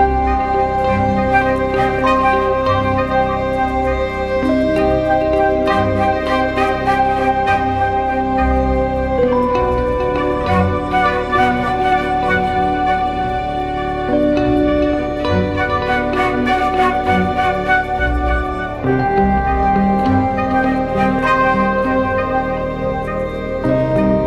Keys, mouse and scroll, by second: 2.4 ctrl+z, 18.7 alt+right click.